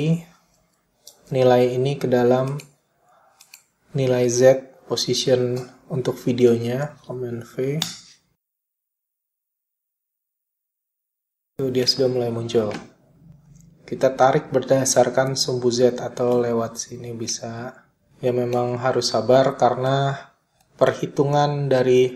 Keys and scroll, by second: 1.4 super+c, 5.9 super+v, 7.0 Return, 11.0 •.